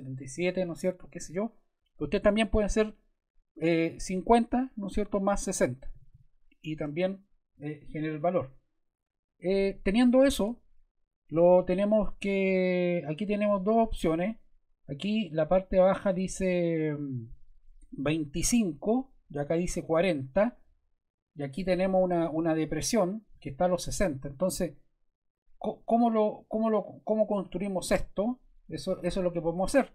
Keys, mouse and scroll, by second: 2.3 5, 4.0 0, 5.6-6.6 typing, 6.7 Return.